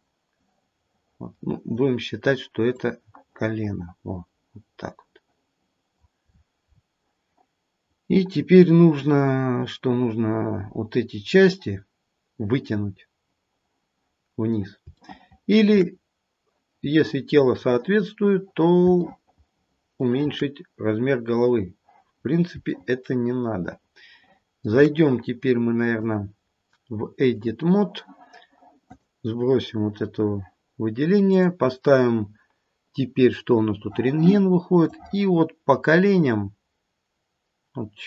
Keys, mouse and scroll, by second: 0.3 click, 2.7 click, 6.2-7.9 scroll down 7, 7.9-10.8 scroll down 2, 15.0 shift+middle click, 15.6 shift+middle click, 15.9-17.7 scroll up 3, 19.2 shift+middle click, 19.4 shift+middle click, 22.1-23.1 scroll down 3, 23.1 shift+middle click, 24.2 shift+middle click, 26.1 click, 28.8 click, 31.7 click, 34.8 click.